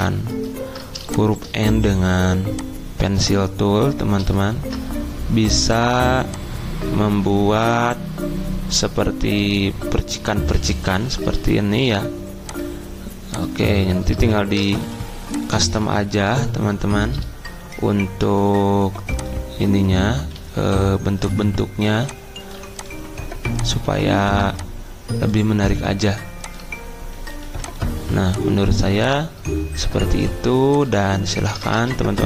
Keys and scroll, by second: 4.6 ctrl+z, 10.9 d, 14.8 a, 18.2 -, 20.3 a, 27.4 -.